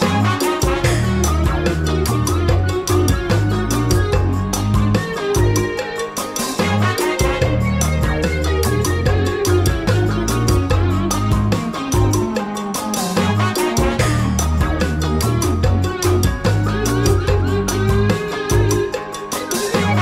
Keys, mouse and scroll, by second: 2.6 click, 6.2-7.0 drag, 7.9 KP_Divide, 8.1 KP_Divide, 12.6 click, 15.0 click, 16.8-17.7 drag.